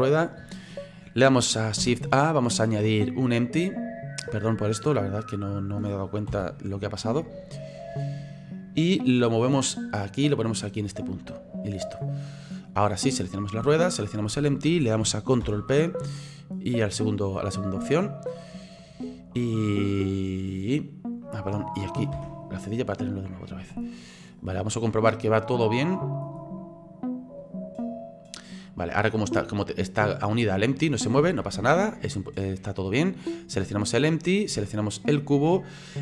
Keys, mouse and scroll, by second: 0.1-0.7 scroll down 9, 0.7-1.8 scroll up 3, 1.8 shift+a, 5.0-6.3 middle drag, 6.3 KP_3, 7.8 click, 9.2-13.3 drag, 13.3 right click, 14.1 shift+right click, 15.4 ctrl+p, 17.3-18.8 middle drag, 18.8-22.1 drag, 22.1 /, 22.7 scroll down 2, 23.0-23.8 middle drag, 23.8-24.4 scroll up 4, 24.4 right click, 24.8-25.5 middle drag, 25.5 right click, 25.9-26.4 middle drag, 26.4-27.2 scroll down 2, 27.4-31.5 drag, 31.5 ctrl+z, 32.9-33.9 scroll up 4, 33.9 right click, 34.2-35.0 scroll down 3, 35.0 shift+right click.